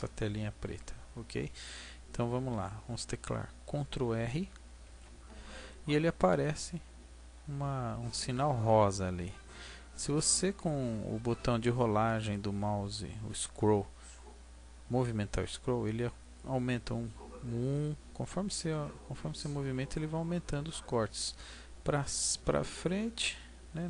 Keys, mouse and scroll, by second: 4.8 ctrl+r.